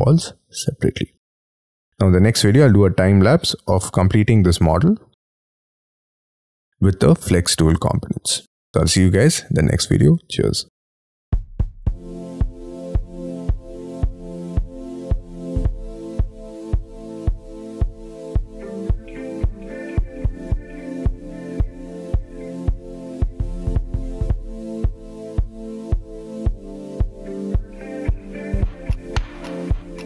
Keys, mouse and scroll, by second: 2.2-2.6 scroll down 8, 2.6 scroll up 5, 2.9 Escape, 3.0 Escape, 3.2 middle click, 8.9 scroll down 3, 10.8 middle click, 11.0 scroll up 6, 11.2 middle click, 11.8 middle click, 12.3 ctrl+click, 15.5 middle click, 15.7 scroll down 5, 15.8 Escape, 15.9 Escape, 15.9 middle click, 16.3 middle click, 16.5 middle click, 16.6 middle click, 16.8 scroll up 5, 17.1 shift+middle click, 17.4 middle click, 17.8 scroll up 5, 18.1 middle click, 18.5 double click, 18.7 double click, 18.7 scroll down 3, 19.0 double click, 19.1 double click, 19.2 middle click, 19.8-20.3 scroll down 13, 20.3-20.7 scroll up 15, 20.8 scroll down 5, 21.2 scroll up 8, 21.4-23.8 typing, 21.4 middle click, 22.8 double click, 23.7 middle click, 23.9 scroll up 6, 24.6 scroll down 6, 24.7 shift+middle click, 25.0-27.3 typing, 25.1 middle click, 25.5 middle click, 25.7 scroll down 1, 26.0 scroll up 6, 26.1 middle click, 26.3 middle click, 26.7 scroll up 1, 27.4 middle click, 27.6 middle click, 28.3 -, 28.4 Return, 29.0 BackSpace, 29.6 Return.